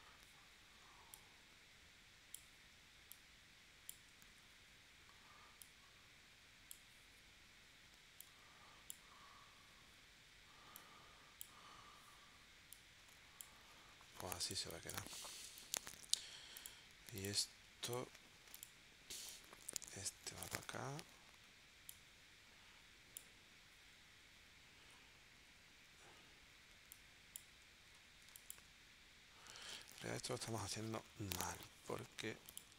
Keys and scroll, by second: 14.6 space, 15.4 space, 28.3 space, 30.7 BackSpace, 31.8 BackSpace.